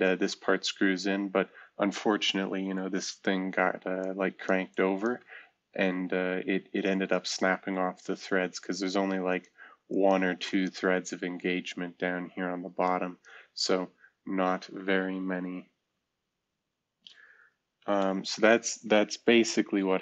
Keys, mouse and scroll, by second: 3.9 ctrl+click, 5.2 click, 8.7-11.0 drag, 12.8 shift+click, 15.3 Caps_Lock, 17.7 shift+F2, 18.3 F2.